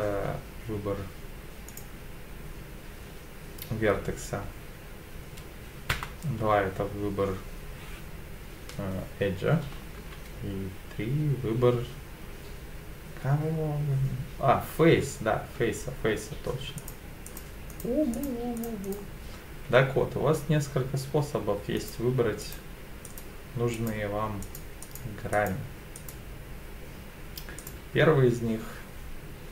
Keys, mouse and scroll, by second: 1.7 click, 5.9 2, 10.0 3, 16.8 click, 17.3 click, 17.7 click, 18.1 click, 18.6 click, 18.8 click, 21.8 click, 22.4 click, 23.0 click, 23.7 click, 24.4 click, 24.8 click, 25.3 click, 25.9 click, 27.6 click.